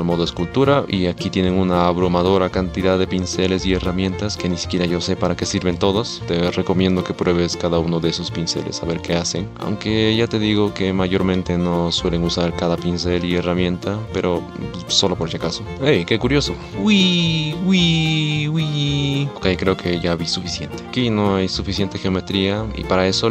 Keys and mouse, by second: 6.3 middle click, 6.3 ctrl+z, 6.5 ctrl+z, 6.5 click, 6.6 middle click, 6.7 ctrl+z, 6.8 click, 7.0 middle click, 7.0 ctrl+z, 7.2 middle click, 7.3 ctrl+z, 7.3 click, 7.4 middle click, 7.4 ctrl+z, 7.8 middle click, 7.9 ctrl+z, 7.9 click, 8.0 ctrl+z, 8.0 ctrl+click, 8.2 ctrl+z, 8.4 click, 8.5 middle click, 8.5 ctrl+z, 8.5 click, 8.6 middle click, 8.6 ctrl+z, 8.8 middle click, 9.0 middle click, 9.1 ctrl+z, 9.4 ctrl+Tab, 9.5 a, 9.7 x, 9.8 ctrl+Tab, 9.8 click, 10.0 middle click, 10.1 middle click, 10.2 shift+click, 10.7 ctrl+z, 10.9 ctrl+z, 10.9 click, 11.0 ctrl+z, 11.0 click, 11.1 ctrl+s, 11.5 click, 11.8 ctrl+z, 12.2 click, 12.4 ctrl+z, 12.5 ctrl+z, 12.6 ctrl+z, 12.8 ctrl+z, 13.2 ctrl+z, 13.2 click, 13.2 f, 13.7 ctrl+z, 14.1 ctrl+click, 14.3 middle click, 14.4 ctrl+z, 14.6 f, 14.9 ctrl+z, 15.1 middle click, 15.1 ctrl+z, 15.1 f, 15.3 ctrl+z, 15.3 click, 15.4 ctrl+z, 15.7 ctrl+z, 15.7-20.8 drag, 16.7 ctrl+z, 23.0 click, 23.0 middle click.